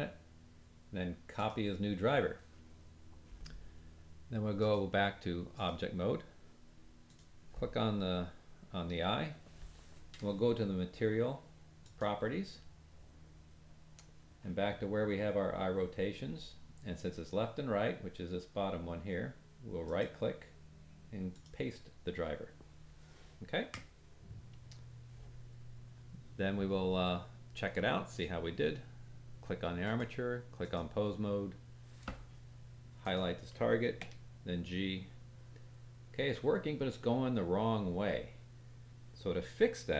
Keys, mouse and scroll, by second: 4.5-7.1 drag, 11.7 click, 13.5-14.5 scroll down 3, 19.7 right click, 28.0 click, 29.7-33.1 drag, 33.9 g.